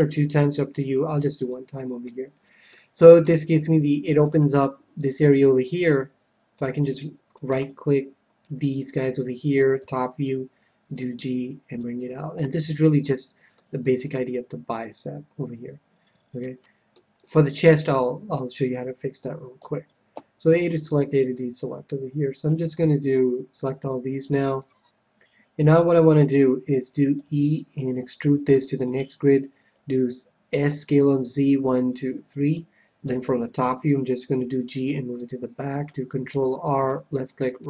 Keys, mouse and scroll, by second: 1.4-3.0 drag, 2.0-4.7 middle drag, 4.2-10.0 right drag, 9.8 KP_7, 10.8-12.6 drag, 12.5 a, 12.8-15.5 middle drag, 16.5-19.1 middle drag, 18.6 KP_1, 19.2 KP_1, 19.6 a, 20.1 a, 20.4-23.2 middle drag, 22.4 c, 24.4-26.1 right drag, 24.6-28.0 middle drag, 27.1 e, 29.0-30.9 drag, 29.7 s, 32.5-34.2 drag, 33.0 KP_7, 34.3 g, 35.2-36.9 drag, 36.3 ctrl+r, 37.5-37.6 right drag.